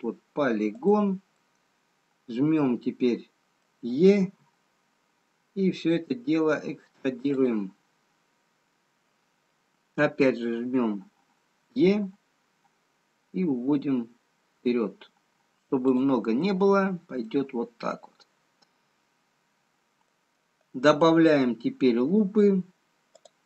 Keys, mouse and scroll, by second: 1.4 middle click, 1.4 click, 4.5 e, 7.8 scroll down 3, 12.0 e, 16.5-17.0 scroll up 1, 17.3 middle click, 17.3 scroll up 1.